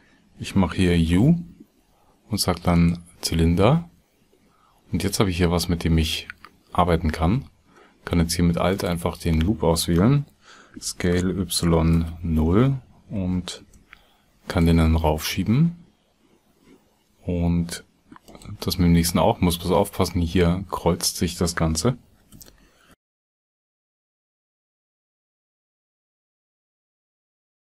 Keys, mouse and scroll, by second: 8.6 alt+click, 18.2 alt+click, 27.2 alt+g.